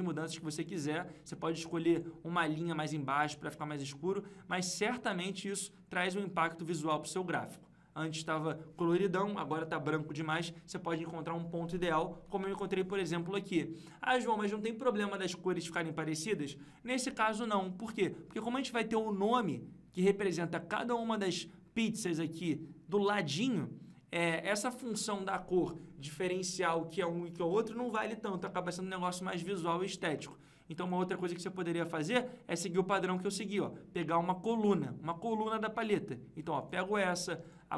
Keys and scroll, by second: 12.2 ctrl+Page_Up.